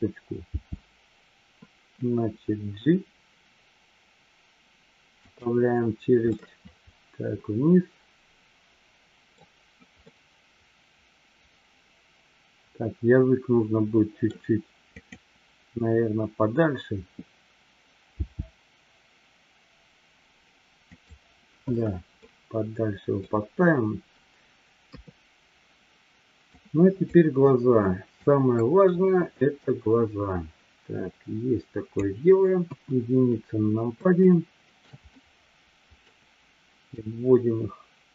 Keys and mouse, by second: 6.3-9.3 middle drag, 10.2-14.3 middle drag, 15.1 click, 22.2-23.2 middle drag, 24.8 KP_3, 26.7-27.2 drag, 28.3-32.7 drag, 32.7 KP_1, 34.3-34.8 shift+middle drag, 35.1-36.1 middle drag, 36.9-38.1 drag.